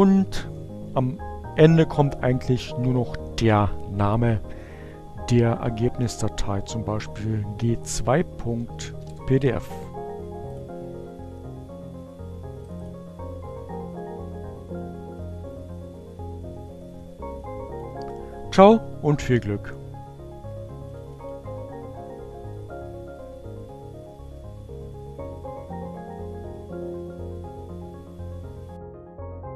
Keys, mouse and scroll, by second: 1.8 space, 4.2 g, 6.7-7.5 typing, 8.6 Return, 10.1 click, 11.9 click, 14.5-18.0 drag, 20.5 click.